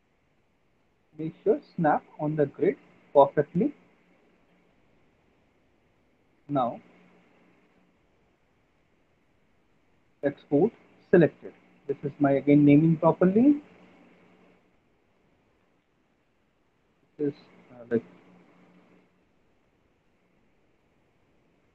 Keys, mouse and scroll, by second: 0.1 middle click, 1.8 click, 2.3 middle click, 2.4 alt+middle click, 4.9 alt+middle click, 4.9 alt+middle click, 5.3 middle click, 5.5 middle click, 5.7 middle click, 6.3 alt+middle click, 7.6 click, 10.6 click, 13.9 click, 14.5 click, 15.5 click, 15.7 Delete, 17.9-20.4 typing.